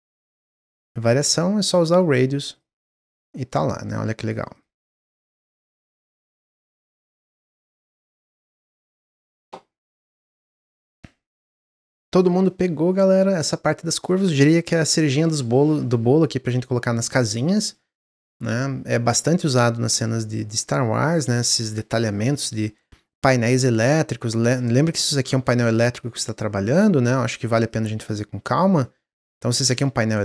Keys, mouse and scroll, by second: 0.6 click, 2.4 click, 2.7 middle click, 3.5-4.5 drag, 4.8 Tab, 5.1-5.4 scroll down 3, 5.4 click, 5.7-8.9 middle drag, 9.9-13.0 middle drag, 13.3-16.5 middle drag, 23.2 middle click, 23.4-24.2 scroll up 1, 24.2 click, 24.7-25.2 scroll up 2, 25.2-26.5 shift+middle drag, 26.5-27.8 drag, 28.7-30.2 middle drag.